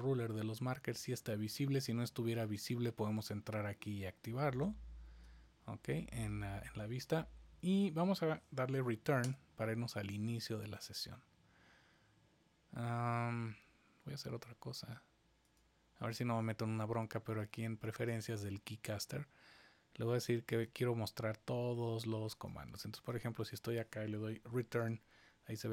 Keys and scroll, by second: 24.7 Return.